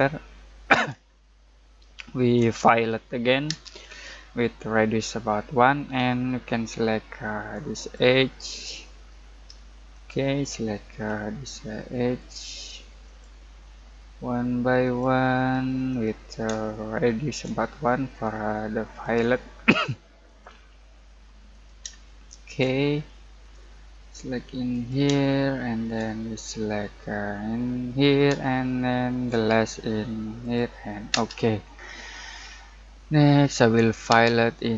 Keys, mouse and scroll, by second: 1.1-3.4 shift+middle drag, 3.4 space, 5.9-7.8 scroll up 1, 7.8 click, 9.1 space, 9.9 click, 10.3 scroll down 1, 10.5 middle click, 10.8-12.3 scroll up 1, 13.0 click, 16.6 shift+middle click, 19.0 click, 21.9 shift+middle click, 23.4 click, 25.2-27.8 shift+middle drag, 27.8 click, 28.5 shift+middle click, 30.4 click, 31.1 space, 31.7-32.3 scroll down 1, 32.6 middle click, 33.3-34.1 scroll up 1, 34.1 space.